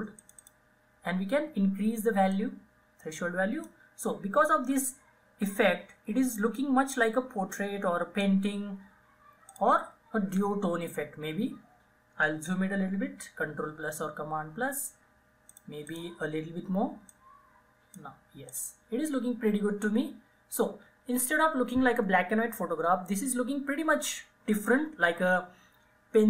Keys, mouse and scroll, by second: 0.3-6.5 drag, 6.5-9.6 drag, 12.8 click, 13.5 ctrl+=, 15.6-18.6 drag.